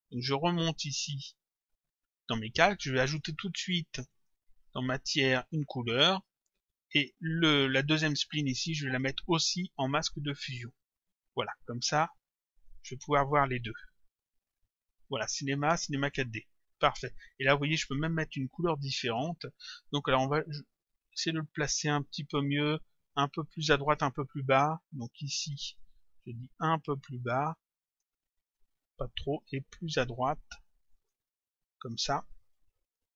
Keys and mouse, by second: 1.5 click, 4.1 click, 5.9 click, 8.4 click, 10.4 click, 12.2 click, 13.7 click, 16.2 click, 18.8 click, 23.8 click, 25.4 click, 27.9 click, 30.9 click, 32.6 click.